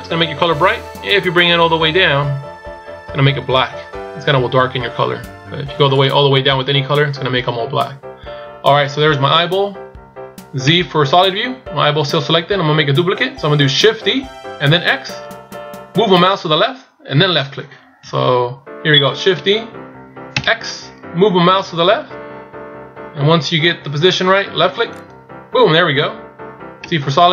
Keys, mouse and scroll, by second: 19.4 shift+d.